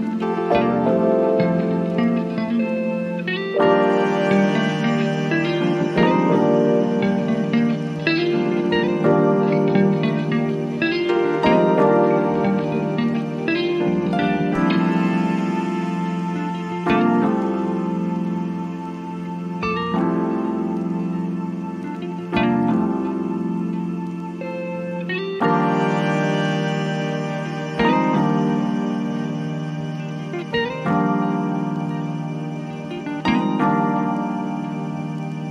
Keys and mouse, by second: 0.9-5.1 drag, 7.5-11.5 drag, 12.7-29.4 drag, 31.9-35.5 drag.